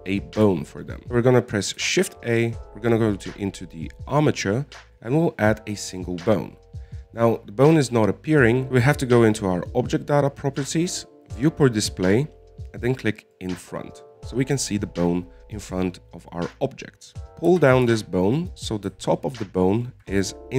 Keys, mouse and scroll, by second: 0.6-1.4 scroll down 2, 1.4-3.2 shift+middle drag, 8.7 click, 12.7-14.7 drag, 17.3-17.6 scroll up 2, 17.6-18.0 scroll down 2, 18.0 shift+middle click, 18.9 g.